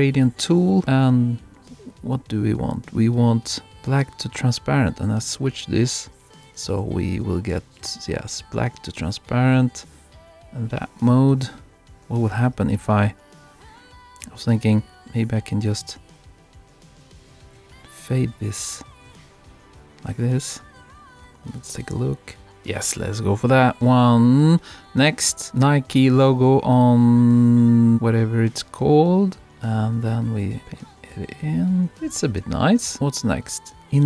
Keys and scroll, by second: 22.4 super+-.